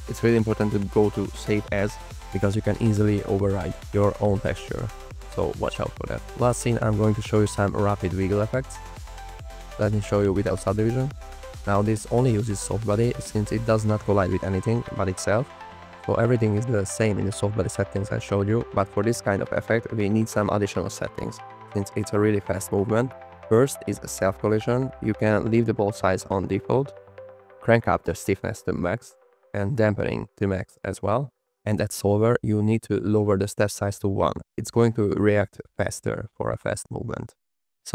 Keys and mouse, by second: 0.0 Right, 0.1 Right, 0.8 Right, 1.3 Right, 1.6 Right, 1.9 Right, 2.1 Right, 2.4 Right, 2.6 Right, 2.9 Right, 3.1 Right, 3.3 Right, 3.6 Right, 3.9 Right, 4.5 Right, 8.4 space, 11.0 space, 11.6 click, 12.2 space, 12.6 click, 16.8 shift+middle drag, 23.0 click, 36.1 click, 36.3 space.